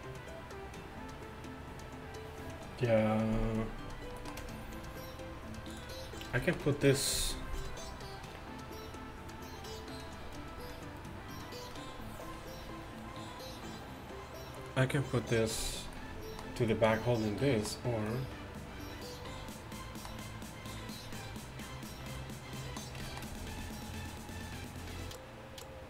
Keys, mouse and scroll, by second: 16.0 middle click.